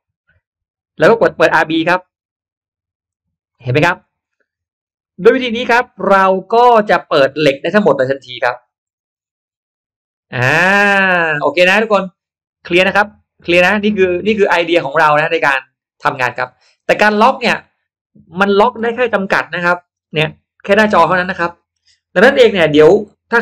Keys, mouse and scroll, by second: 0.6 middle click, 0.6-0.9 scroll down 1, 2.0 click, 3.0 click, 3.7-4.4 scroll down 4, 4.4-5.1 scroll up 3, 5.0 middle click, 5.1 scroll down 2, 5.8 scroll up 1, 5.8 scroll down 2, 6.0 scroll up 1, 6.3 middle click, 6.9 middle click, 7.8 middle click, 8.6 middle click, 9.1 middle click, 10.6 middle click, 12.4-16.3 drag.